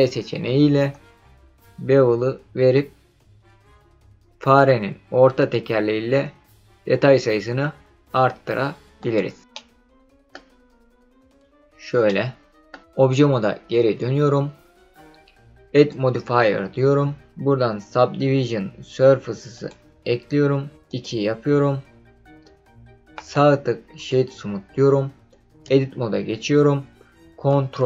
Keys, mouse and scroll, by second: 5.2-7.1 scroll up 4, 7.1-9.0 scroll up 1, 9.0 click, 9.5-10.4 middle drag, 10.4-12.0 scroll down 3, 12.0-12.8 middle drag, 13.8 Tab, 15.7-19.7 drag, 20.8 click, 23.1 right click, 25.6 Tab.